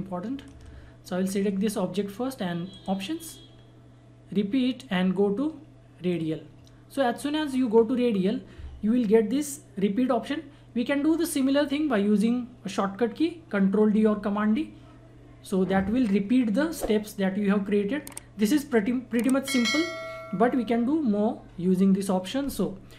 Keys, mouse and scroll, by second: 6.1 click, 7.8 scroll down 1.